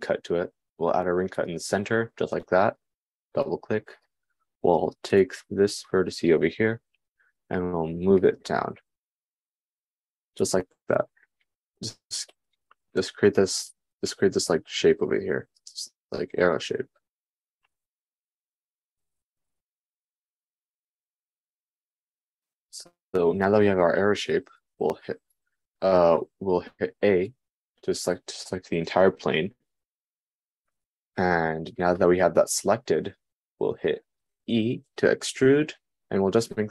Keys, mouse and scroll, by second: 8.0 g, 11.9 g, 13.9 Tab, 19.1 Tab, 24.2 Tab.